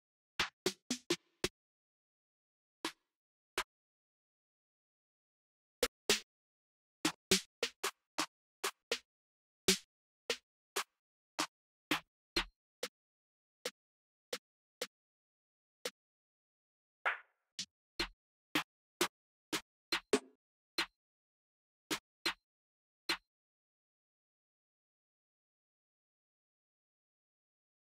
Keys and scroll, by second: 0.1 Page_Up, 0.2 Page_Up, 1.2 Page_Up, 3.3 Page_Up, 3.9 Page_Up, 4.7 ctrl+space, 5.2 ctrl+space, 5.5 Page_Up, 5.7 Page_Up, 6.7 Page_Up, 6.9 Page_Up, 7.2 Page_Up, 8.3 Down, 8.5 Down, 9.4 Down, 10.0 Up, 10.4 Up, 11.1 Up, 11.6 Up, 12.6 Up, 14.0 Down, 14.5 Up, 16.2 Up, 16.8 Up, 17.3 Up, 18.7 Up, 19.3 Up, 19.9 Up, 20.5 Down, 21.6 Down, 22.0 Up, 24.6 f, 26.6-27.4 typing.